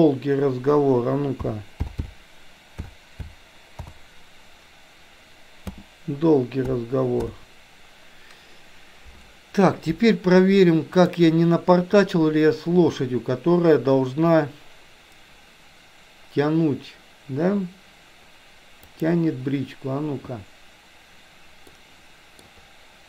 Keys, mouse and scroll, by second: 10.9-20.4 drag, 21.8 middle click.